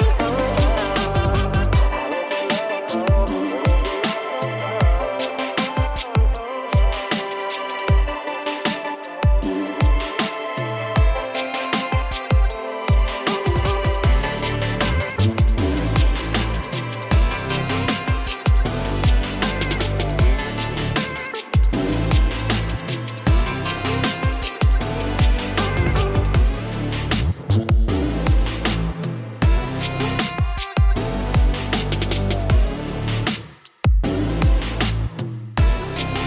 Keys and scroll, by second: 3.2 ctrl+alt+z, 17.4 ctrl+shift+g, 20.0-22.3 typing, 22.7 Return, 25.6 ctrl+alt+shift+e, 29.5 l, 29.6 i, 30.5 i, 32.9 f, 32.9 y.